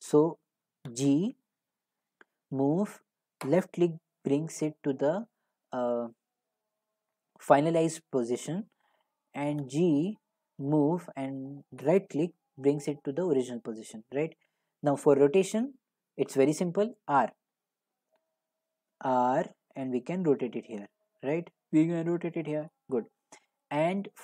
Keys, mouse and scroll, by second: 0.8 g, 3.5 click, 6.0-8.0 drag, 9.6 g, 12.0-16.9 right drag, 16.9 click, 22.7-24.2 right drag, 22.7 r.